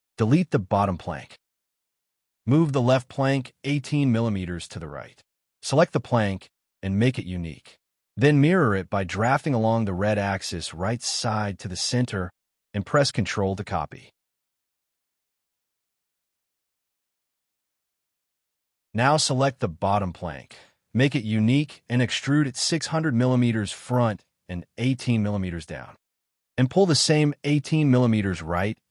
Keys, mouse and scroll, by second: 1.4 Delete, 1.6 scroll down 1, 2.0 scroll up 1, 3.8-4.7 typing, 4.9 right click, 6.1 middle click, 6.6 scroll down 1, 7.1 middle click, 12.6 space, 13.0 scroll down 1, 13.2 middle click, 17.6 shift+middle click, 18.8 scroll up 1, 20.9 right click, 22.0 scroll up 1, 22.5 double click, 22.7 p, 24.3 0, 24.6 Return, 24.9 middle click, 25.9-26.7 typing, 26.7 middle click, 27.0 scroll up 1, 28.2-28.9 typing.